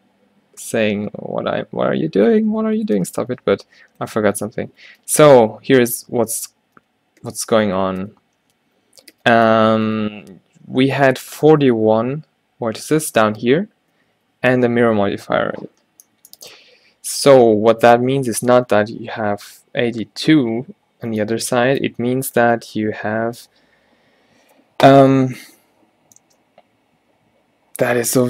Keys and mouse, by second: 2.6 ctrl+z, 2.8 ctrl+z, 3.0 ctrl+z, 3.3 ctrl+z, 3.8-6.4 drag, 5.1 ctrl+z, 6.4 ctrl+z, 7.0 ctrl+z, 7.4 ctrl+z, 7.8 ctrl+z, 8.0 ctrl+z, 8.3 ctrl+z, 9.3 ctrl+z, 9.7 ctrl+z, 10.1 ctrl+z, 14.2 ctrl+z, 14.7 ctrl+z, 16.1-18.1 drag, 16.7 Tab, 21.4 middle click.